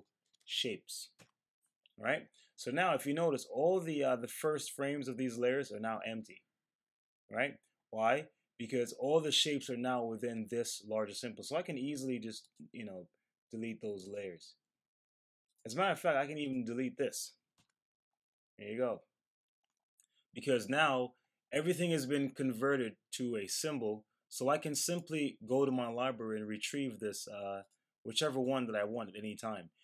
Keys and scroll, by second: 0.0-0.9 typing, 1.1 Return.